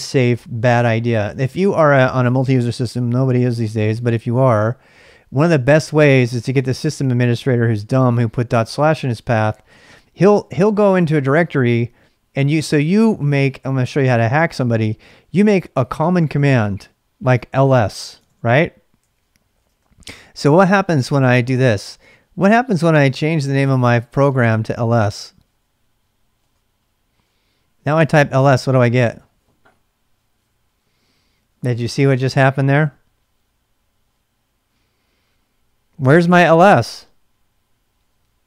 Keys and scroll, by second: 18.2-20.1 typing, 22.7-25.0 typing, 26.4 Return, 27.7-28.5 typing.